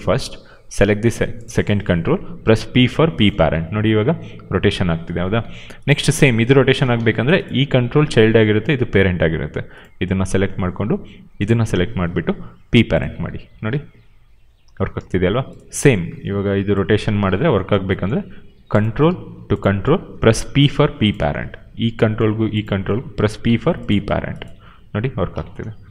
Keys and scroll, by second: 2.7 p, 3.4 e, 5.0 ctrl+z, 5.3 q, 5.9 e, 6.6 ctrl+z, 6.9 q, 12.5 p, 13.4 e, 14.9 ctrl+z, 17.0 ctrl+z, 17.9 q, 20.5 p, 23.3 p, 24.4 e, 25.2 ctrl+z.